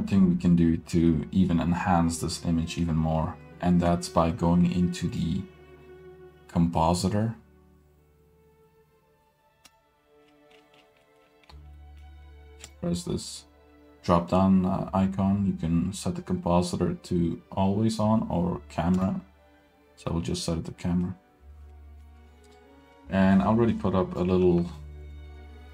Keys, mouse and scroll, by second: 2.8-5.1 scroll up 4, 5.1-9.8 drag, 10.2-11.0 scroll down 4, 11.0 middle click, 11.2-11.7 scroll up 1, 11.7 middle click, 11.7-12.1 scroll up 1, 12.7-21.1 drag, 22.3-22.9 scroll down 3, 22.9 middle drag, 23.5-23.9 scroll up 3, 23.9-24.3 drag, 24.6 g, 25.5-25.7 middle drag.